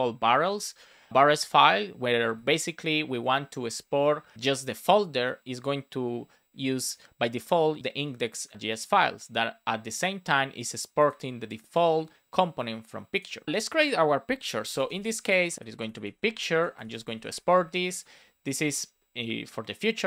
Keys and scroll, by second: 0.4 Return, 2.2 super+s, 14.9 space, 15.5 shift+p, 16.4 super+Left, 17.3 space, 17.7 super+Right, 18.1 space, 19.2 space.